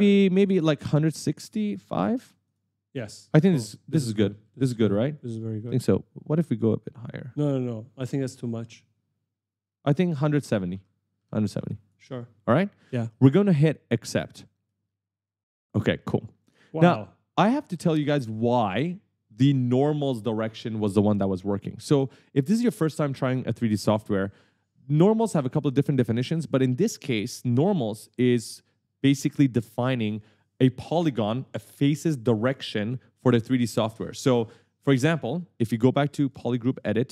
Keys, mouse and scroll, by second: 1.2 click, 2.6 click, 3.1 s, 3.8 w, 4.4 s, 6.6 click, 10.6 click, 12.0 click, 14.3 right click, 14.4 w, 16.1 click, 16.7 right click, 16.7 w, 17.7 a, 18.6 s, 19.4 e, 36.3 click, 36.8 right click.